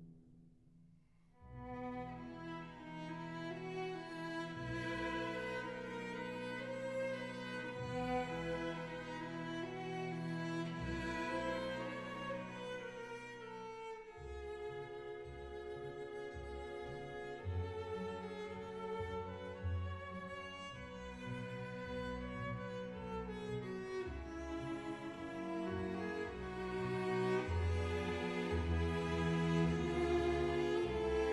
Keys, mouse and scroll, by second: 0.7-1.8 shift+drag, 1.9 Delete, 4.3 Delete, 6.5 Delete, 9.0-12.0 drag, 13.2 alt+z, 16.0 2, 17.2 alt+click, 18.3 f, 19.3 click, 20.3 click, 22.3 ctrl+r, 25.5 click, 26.0 ctrl+r, 28.3 click, 29.2 ctrl+r.